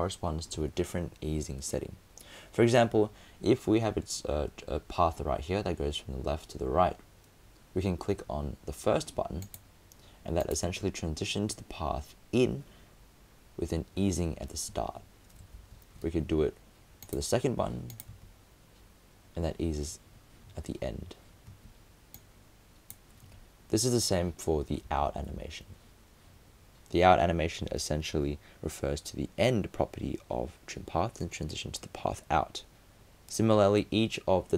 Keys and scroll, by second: 15.4 super+space, 15.6 super+z, 24.9 super+z.